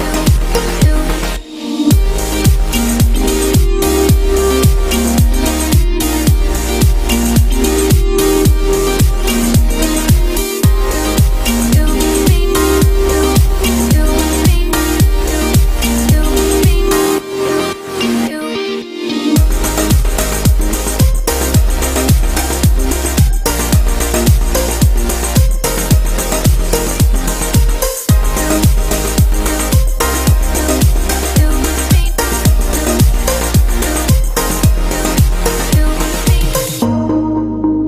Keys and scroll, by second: 4.2 ctrl+t.